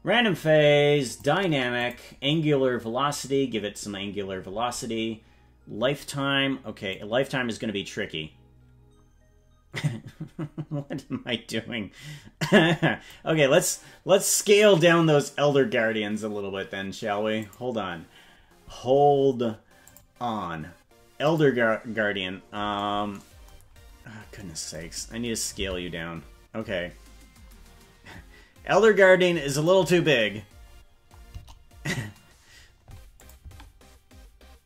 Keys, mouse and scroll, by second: 1.0 click, 1.7 click, 2.3 scroll down 1, 3.1 click, 6.9-13.2 drag, 12.6 middle click, 17.4 click, 18.3-19.9 scroll down 9, 19.9 click, 20.5-21.1 scroll down 1, 21.2 click, 21.8-22.6 scroll down 6, 23.6-24.0 scroll down 2, 25.6 s, 30.3-30.9 scroll up 7, 31.3 KP_0, 31.9-32.7 scroll up 3, 33.2 click, 33.4 space.